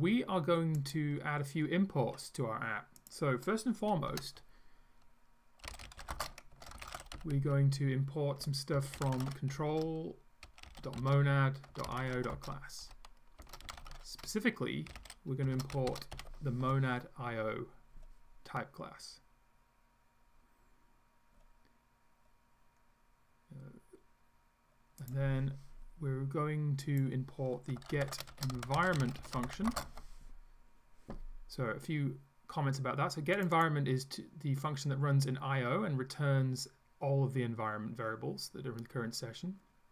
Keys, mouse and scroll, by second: 0.8 click, 3.0 click, 4.1 Return, 5.5-16.7 typing, 25.0 click, 26.9 click, 27.7-30.2 typing, 33.4 click.